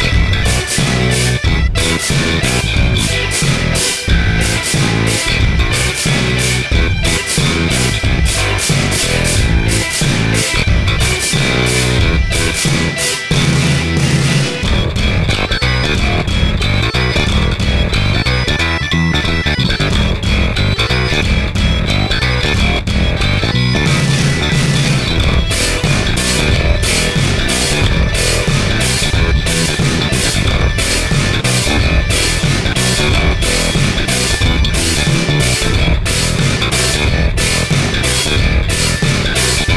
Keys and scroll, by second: 27.1 ctrl+z.